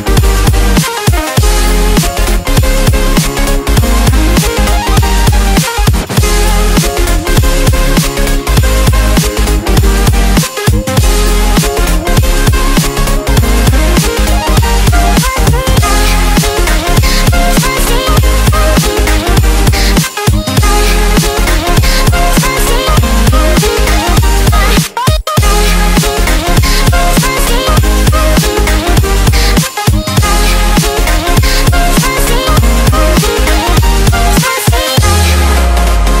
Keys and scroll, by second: 7.4 Left, 8.4 Left, 11.4 shift+super+F10, 15.1 super+z, 16.7 shift+super+space, 21.0 super+x, 22.9 space, 23.4 space, 23.4 space, 24.0-24.7 space, 28.5 super+g, 32.3 super+g, 33.5 super+b, 35.7-36.2 typing.